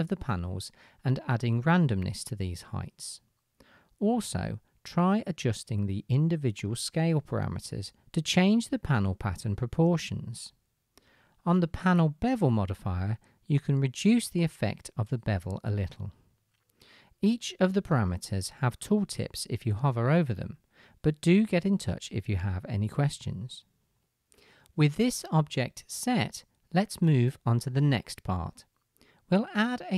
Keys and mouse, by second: 14.2 KP_0, 21.0 KP_0, 24.0-27.3 middle drag, 24.0-27.3 right drag, 29.6-29.9 drag.